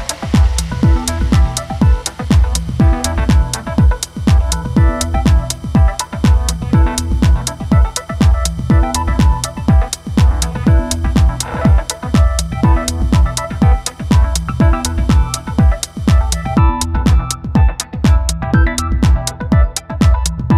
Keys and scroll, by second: 10.4 space, 18.6 d, 19.2 shift+b.